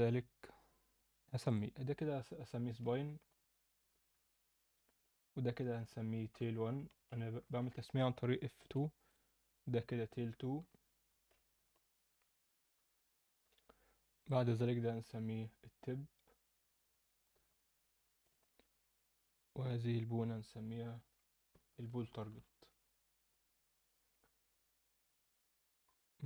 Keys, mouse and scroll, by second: 1.4 click, 2.3 F2, 5.1 click, 6.3 F2, 9.1 click, 9.4 click, 10.6 F2, 14.1 click, 16.6 F2, 19.3 click, 21.1 F2, 25.8-26.1 scroll up 2.